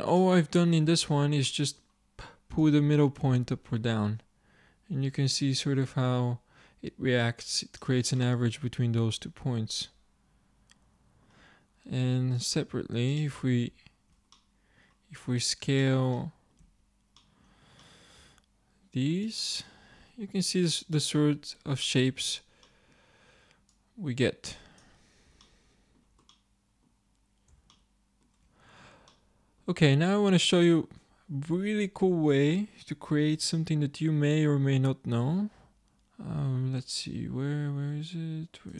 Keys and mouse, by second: 0.2-1.5 drag, 1.5 middle click, 3.1-4.2 drag, 8.3 middle click, 12.0 z, 15.5-16.6 middle drag, 16.6 z, 18.3 s, 22.1 Tab, 24.2 click, 25.5 click, 30.9-32.2 drag.